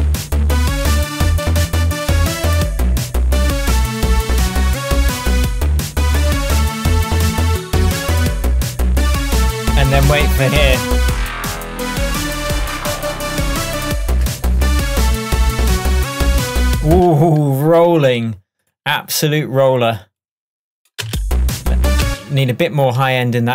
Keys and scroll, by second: 17.0 space, 21.1 space.